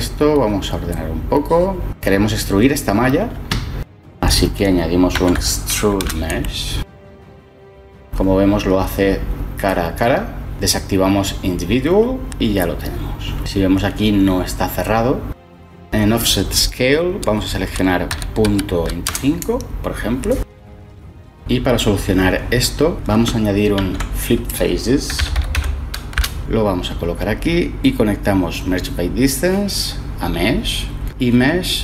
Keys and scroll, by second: 4.3 ctrl+shift+a, 4.5-6.1 typing, 6.4 Return, 18.6-20.3 typing, 23.7 ctrl+shift+a, 24.8-25.9 typing, 26.1 Return.